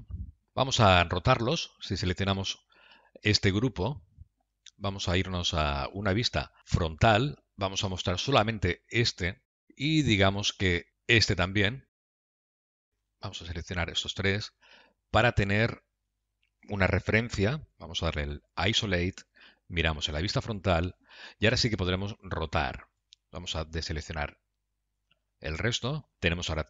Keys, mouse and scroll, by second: 0.4 click, 2.5 click, 4.8 middle click, 6.6 KP_3, 6.9 KP_1, 9.9 middle click, 11.9 shift+click, 12.6 middle click, 13.7 shift+click, 14.9 middle click, 18.5 KP_Divide, 19.8 KP_1, 23.7 shift+click, 25.2 click, 26.1 click, 26.2 shift+click.